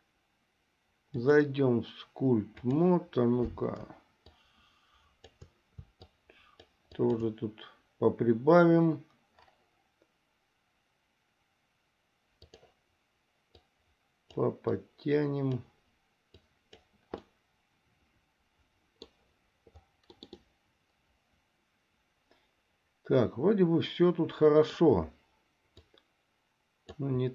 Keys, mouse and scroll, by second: 1.3-3.1 drag, 4.6-5.6 shift+drag, 6.4 shift+click, 7.2 shift+click, 12.6 click, 13.7 click, 15.0 click, 16.6 click, 17.5-19.3 middle drag, 20.3 middle click, 20.7-25.1 middle drag, 25.9-27.3 drag.